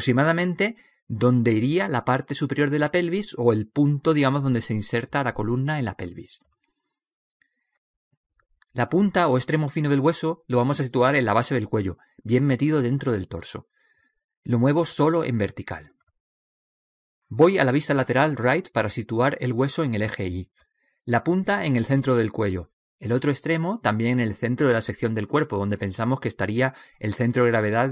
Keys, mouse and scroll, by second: 2.9 KP_1, 4.1-5.3 middle drag, 5.5 middle click, 6.8 click, 9.6 right click, 10.4 middle click, 10.5 right click, 10.6 middle click, 11.5 click, 18.2 KP_3, 20.1-23.4 drag, 23.5 right click, 25.2 click.